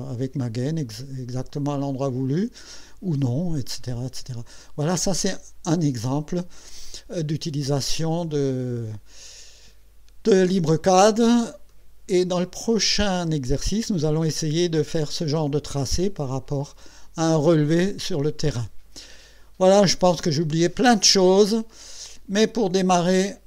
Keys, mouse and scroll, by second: 0.3 scroll down 2, 1.5 middle click, 3.6 scroll down 1, 4.7 middle click, 10.9-11.2 scroll down 2, 11.3 scroll up 2, 11.7 middle click.